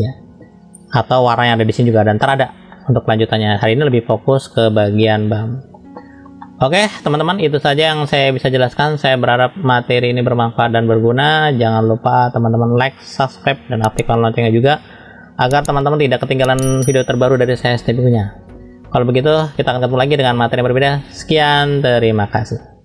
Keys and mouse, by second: 2.7 middle click, 3.9 middle click, 5.0 middle click, 5.9 shift+middle click, 6.4 middle click, 7.0 shift+middle click, 7.7 middle click, 9.0 click, 10.9 middle click.